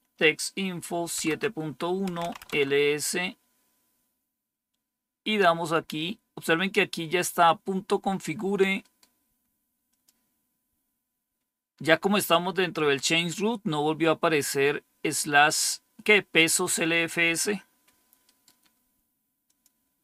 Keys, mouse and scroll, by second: 1.1 Return, 1.8-2.5 typing, 5.6-8.7 drag, 8.7-9.8 right drag, 9.8-10.9 drag, 18.1-19.4 right drag, 19.4 click.